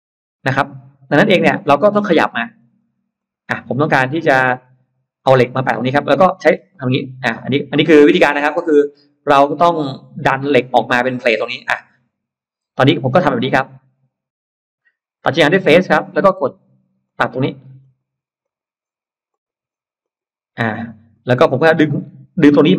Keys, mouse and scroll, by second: 1.5 space, 1.7 click, 2.4 click, 3.1 click, 3.5-4.2 scroll up 1, 3.9 middle click, 4.5-4.8 scroll down 1, 5.1 middle click, 6.1 middle click, 6.5 middle click, 6.5-7.3 scroll down 4, 7.3-8.1 scroll up 2, 7.9 middle click, 15.3 click, 16.9 click, 17.7 click, 18.3 click, 19.1 click, 19.9 click, 20.5 middle click, 21.0 scroll down 1.